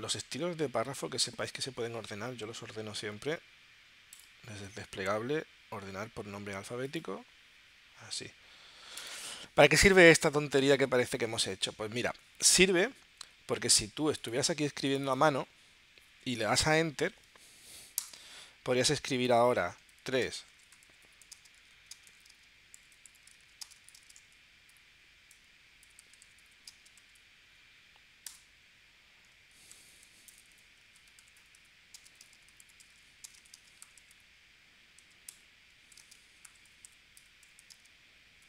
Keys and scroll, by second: 18.0 Return, 19.5 3, 25.8 /, 28.3 Return, 35.0 r, 37.2 BackSpace.